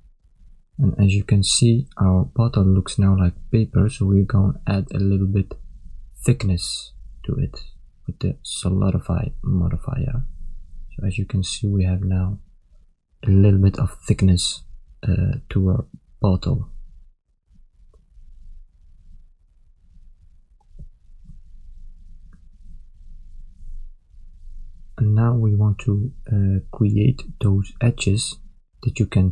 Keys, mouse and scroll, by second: 0.4 shift+middle click, 1.1 middle click, 2.9 Tab, 5.4 click, 6.9 click, 11.6 click, 13.1 click, 15.1 ctrl+middle click, 15.8 middle click, 17.3 ctrl+middle click, 17.9 shift+middle click, 18.6 ctrl+middle click, 19.9 KP_1, 21.1 ctrl+middle click, 23.0 ctrl+middle click, 24.8 shift+middle click, 26.0 ctrl+middle click, 28.3 click.